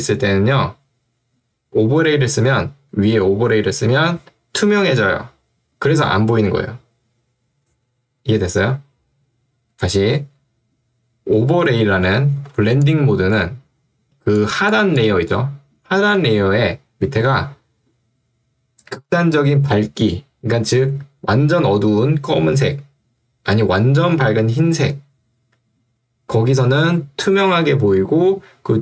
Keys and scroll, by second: 16.2 Escape.